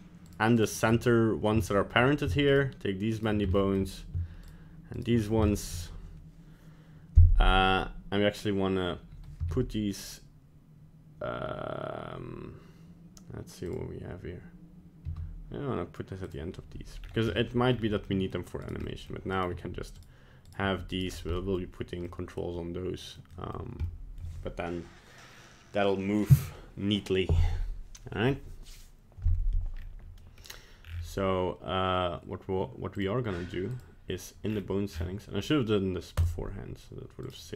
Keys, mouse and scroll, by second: 0.3 shift+right click, 0.6 shift+right click, 1.6 shift+middle click, 2.5 shift+right click, 3.2 shift+right click, 3.5 shift+middle click, 4.5 shift+right click, 5.0 shift+right click, 5.2 scroll down 2, 5.4 shift+middle click, 9.4 m, 13.6 click, 15.0 m, 17.0 scroll down 2, 17.3 middle click, 17.7-18.0 scroll up 3, 18.0 middle click, 18.7 right click, 18.8 middle click, 19.4 right click, 19.5 g, 20.5 right click, 20.6 g, 21.1 scroll down 2, 21.3 middle click, 22.0 middle click, 23.3 middle click, 23.8 middle click, 29.7-30.3 scroll up 2, 30.2 middle click, 30.8-31.8 scroll down 7, 32.9 click, 33.7 click, 34.4-35.7 scroll down 13, 36.2 click, 37.3 right click.